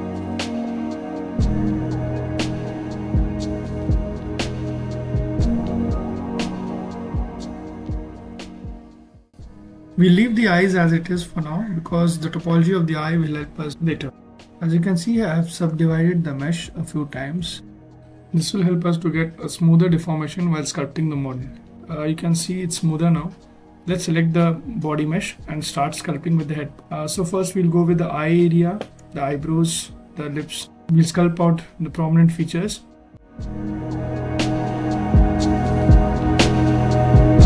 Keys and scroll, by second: 10.9 f.